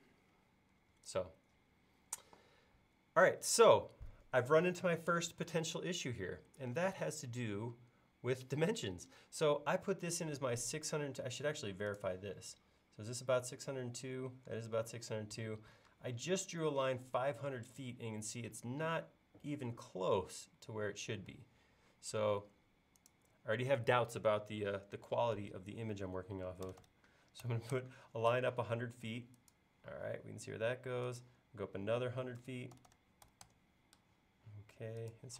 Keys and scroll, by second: 11.1 i, 15.9 space, 22.0 l, 26.0-27.2 typing, 28.3-30.0 typing, 32.2-35.3 typing.